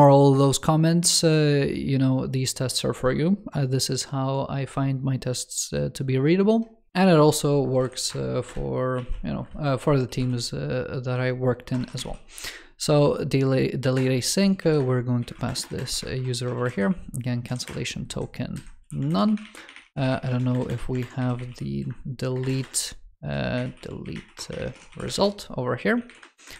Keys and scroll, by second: 18.9 super+Left, 20.9 alt+BackSpace, 22.4 alt+BackSpace, 26.3 alt+Left.